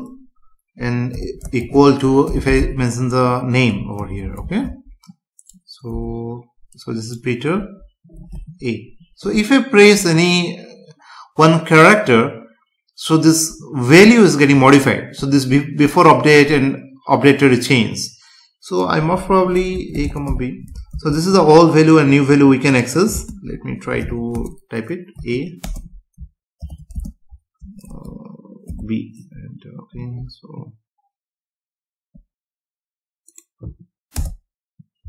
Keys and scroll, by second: 4.4 ctrl+s, 5.9 F5, 20.0 space, 20.9 ctrl+s, 23.1 space, 34.1 Return.